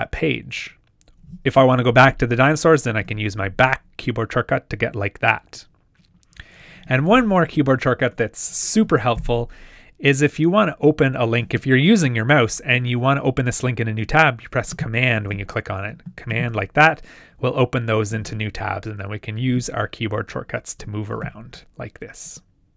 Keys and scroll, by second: 3.0 super+[, 18.5 shift+super+], 20.8 shift+super+[.